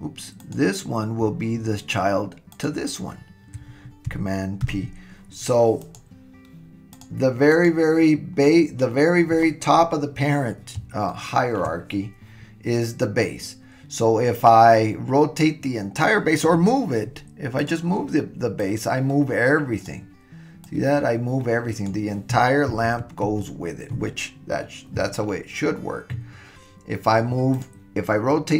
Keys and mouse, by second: 0.4 click, 2.6 shift+click, 4.6 super+p, 7.5 click, 11.1-11.6 shift+middle drag, 17.6 click, 18.6-19.9 drag, 20.7-21.9 drag, 23.0 super+z, 23.3 super+z, 27.5-28.5 drag.